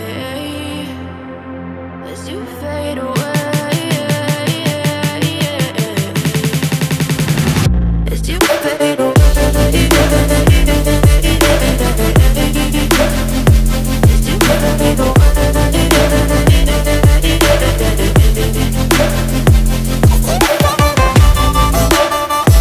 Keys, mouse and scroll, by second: 1.9 click, 2.6 click, 6.0 F9, 7.3 click, 8.2 ctrl+o, 8.9 scroll down 1, 9.8 scroll down 1, 10.3 scroll down 1, 10.9-11.3 scroll down 1, 11.4 scroll down 1, 12.5 scroll down 1, 13.5 scroll down 1, 14.4 scroll down 1, 15.3 scroll down 1, 15.9 scroll down 1, 16.5 scroll down 1, 18.0-18.3 scroll down 1, 18.8 scroll down 1, 19.4-20.1 scroll down 1, 20.3 scroll up 1, 21.9-22.6 scroll up 2.